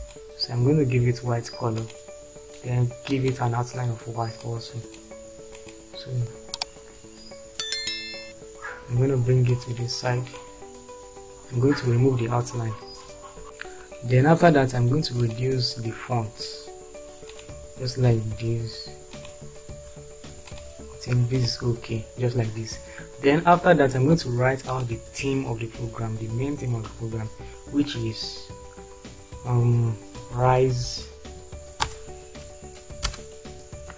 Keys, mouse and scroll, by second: 30.1 shift+r, 30.7 shift+i, 30.9 shift+e, 31.8 space, 33.0 Return.